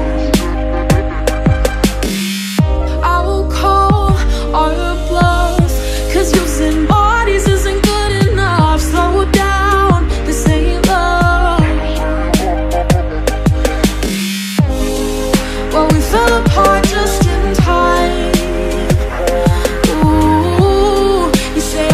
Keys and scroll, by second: 2.1 p, 7.0 ctrl+=, 10.7 ctrl+-, 15.8 ctrl+-, 21.1 p, 21.6 ctrl+=.